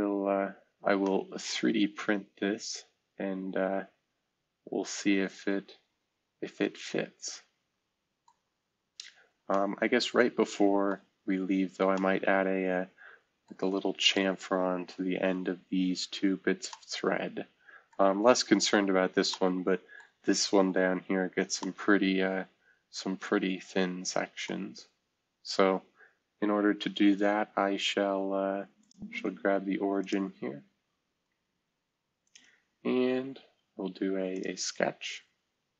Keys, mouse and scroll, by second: 0.0-0.6 scroll down 2, 0.6-1.5 scroll up 2, 8.3 middle click, 8.4-9.0 scroll down 2, 9.0-9.9 scroll up 2, 10.9 middle click, 11.3-12.1 scroll up 2, 14.6 scroll down 2, 15.2 scroll down 2, 15.8 scroll down 2, 16.3 scroll up 2, 16.7-18.7 middle drag, 18.9-19.7 scroll down 1, 19.3-20.7 middle drag, 20.3-20.9 scroll up 1, 24.5 middle click, 24.6-26.7 scroll down 1, 28.8 click, 29.1 space, 30.0 click, 30.6-31.1 scroll down 1, 31.1-31.5 scroll up 1, 32.2-33.8 drag, 34.3 click.